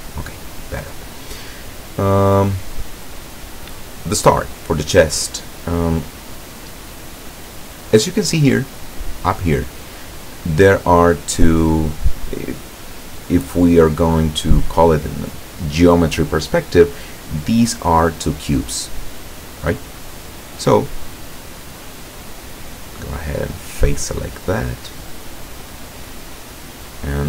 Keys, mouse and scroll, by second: 0.0 middle click, 0.1 scroll up 2, 0.8 middle click, 20.9-21.7 middle drag, 22.7 click, 23.6 right click, 24.2-26.1 middle drag, 26.6-27.2 drag.